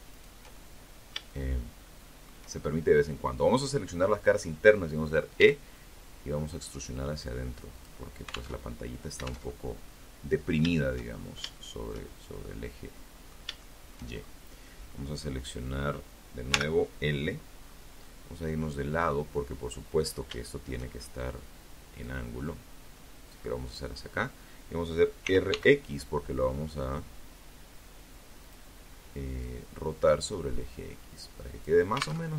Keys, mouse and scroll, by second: 3.5 e, 5.9 click, 6.7 alt+Tab, 7.7 alt+Tab, 8.0 alt+middle click, 9.0 shift+scroll up 2, 9.3 shift+scroll down 2, 9.7-10.9 shift+middle drag, 11.1 middle click, 11.8 shift+middle click, 12.3-12.6 shift+scroll up 1, 14.7 l, 15.9 scroll down 2, 16.2-18.1 middle drag, 18.6 shift+middle click, 20.2-22.1 drag, 23.4 r, 23.7 x, 26.6 click, 27.6-30.0 drag, 30.3 alt+Tab, 32.1 alt+Tab.